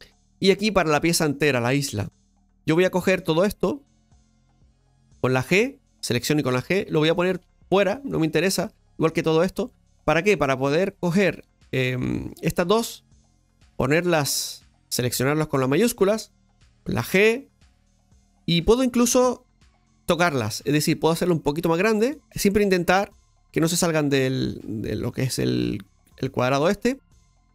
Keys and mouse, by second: 1.5 right click, 2.0 click, 5.3 g, 6.0 right click, 6.2 g, 7.2 right click, 7.8 g, 8.6-10.0 right drag, 10.0 g, 10.5-13.4 right drag, 13.4-14.7 drag, 15.5 shift+right click, 27.0 right click.